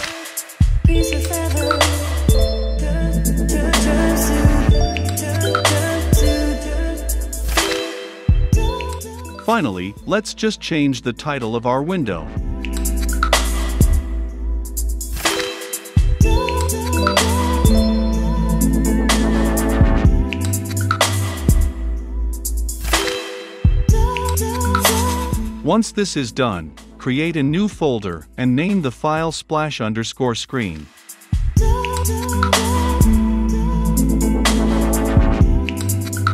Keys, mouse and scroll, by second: 0.6-3.9 typing, 1.3 click, 2.1 click, 5.9-8.3 drag, 8.3-8.7 scroll up 2, 8.7 click, 9.2-10.5 scroll up 2, 10.5-11.6 drag, 11.5-13.6 typing, 14.8 >, 17.0 right click, 20.6-25.2 right drag, 25.2-27.2 drag, 27.2-27.8 right drag, 27.5-30.0 typing, 30.5-33.3 drag, 33.1-34.6 typing, 34.6-36.3 right drag.